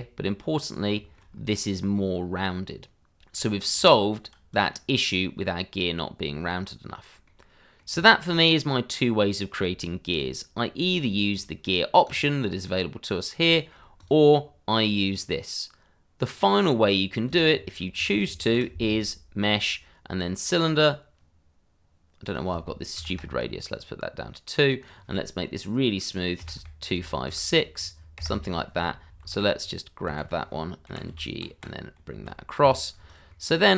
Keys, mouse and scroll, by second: 0.2 scroll up 1, 0.9 middle click, 1.3 scroll up 1, 3.4 scroll down 1, 4.2 shift+middle click, 4.7 Tab, 5.2 click, 5.5 scroll down 1, 6.6 scroll up 1, 7.2 middle click, 8.2 shift+middle click, 9.8 shift+middle click, 9.9 middle click, 10.1 shift+middle click, 10.6 scroll down 1, 10.8 shift+middle click, 11.3 click, 13.4 shift+middle click, 13.5 middle click, 13.7 shift+middle click, 13.9 click, 17.0 scroll down 1, 17.2 shift+click, 17.5 shift+middle click, 18.4 shift+a, 20.6 click, 22.9 2, 23.0 Return, 24.8 click, 26.4 2, 26.6 5, 26.9 KP_6, 28.1 KP_Enter, 29.2-32.1 typing, 29.6 click, 32.7 click, 33.0 shift+click, 33.3 shift+middle click.